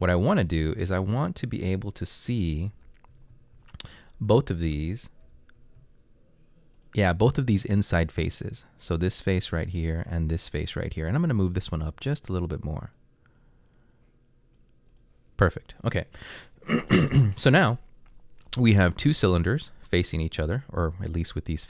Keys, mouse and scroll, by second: 2.5-6.3 typing, 9.3 drag.